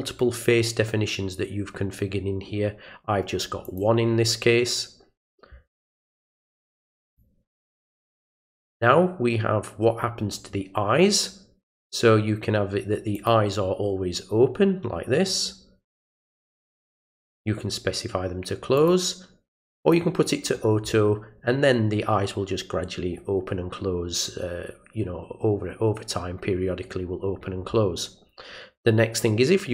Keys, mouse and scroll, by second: 3.6 click, 7.1 click, 13.1 click, 15.9 click, 17.0 click, 18.8 click, 19.8 click.